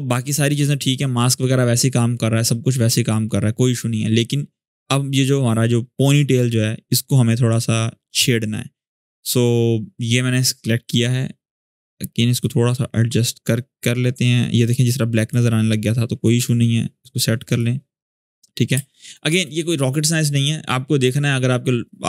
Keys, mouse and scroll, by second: 6.1-8.0 scroll up 1, 8.9 click, 12.1-13.4 drag, 16.0-16.9 drag, 17.3-17.9 click, 18.1-18.5 scroll up 1, 18.5 space, 18.6 click, 19.0 space.